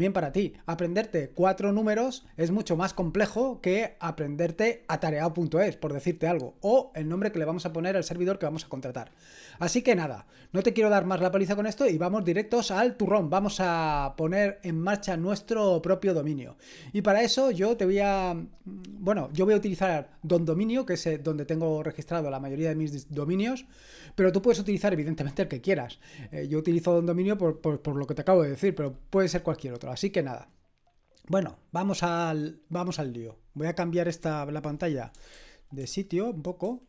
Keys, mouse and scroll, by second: 32.1 click, 36.7 super+h.